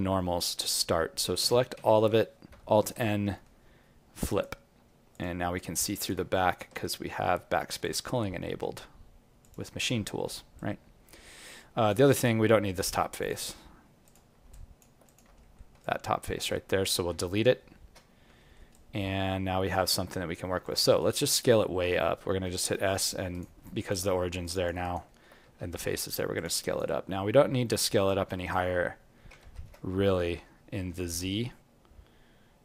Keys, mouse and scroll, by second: 0.1 scroll up 1, 1.3 scroll up 2, 1.4 a, 2.8 alt+n, 5.5 alt+click, 6.7 z, 10.1 alt+middle click, 10.5 alt+click, 12.0 right click, 13.1 click, 14.5 alt+click, 15.0 click, 15.4 alt+middle click, 15.8 alt+click, 17.0 x, 18.3 alt+middle click, 18.7 alt+click, 20.1 right click, 20.6 alt+click, 21.0 alt+right click, 21.2 alt+click, 21.6 alt+middle click, 22.3 s, 23.6 alt+click, 24.8 alt+right click, 25.0 alt+middle click, 25.4 s, 26.6 alt+right click, 26.9 alt+click, 28.2 alt+right click, 29.4 ctrl+z, 30.7 s.